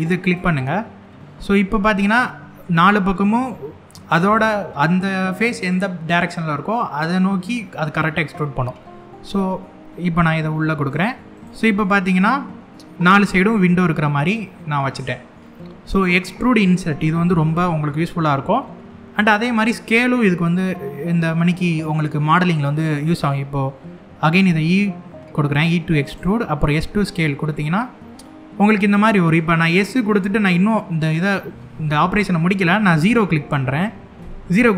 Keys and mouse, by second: 10.6 click, 11.0 click, 11.5-14.8 middle drag, 17.2 middle click, 19.8 shift+middle click, 20.8 click, 21.3 middle click, 22.6 middle click, 24.1 e, 25.7 click, 26.4 s, 33.9 KP_0.